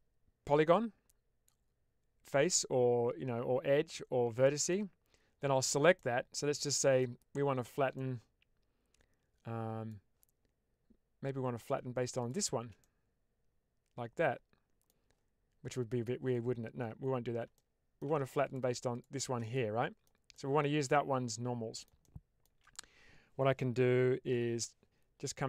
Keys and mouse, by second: 4.4 shift+middle click, 5.8-6.9 middle drag, 7.8-9.8 middle drag, 12.1 shift+click, 12.7-14.9 middle drag, 17.5 shift+middle click, 18.3 shift+click, 18.8 shift+click, 19.4 middle click, 20.2-21.7 middle drag, 21.9 shift+middle click.